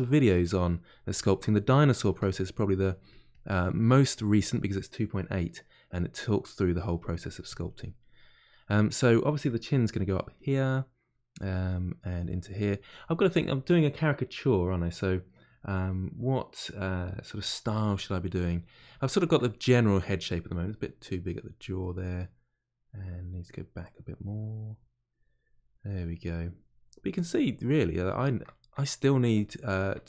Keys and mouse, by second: 1.1 shift+click, 1.5 middle click, 1.9 shift+click, 2.3 middle click, 2.9 click, 3.5 middle click, 4.0-5.0 drag, 5.0-7.0 middle drag, 7.0 click, 7.9-11.8 middle drag, 11.8 click, 12.5-21.0 middle drag, 21.0 click, 21.8-22.8 middle drag, 22.8-28.1 drag, 28.1-30.0 shift+middle drag.